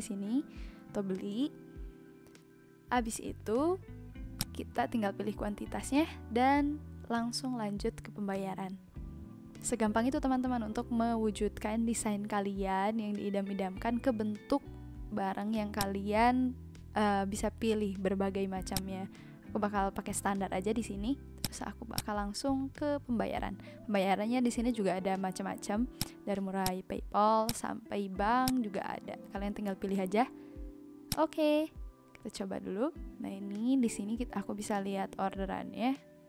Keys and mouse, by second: 4.3 click, 15.7 click, 18.7 click, 21.4 click, 26.0 click, 31.2 click.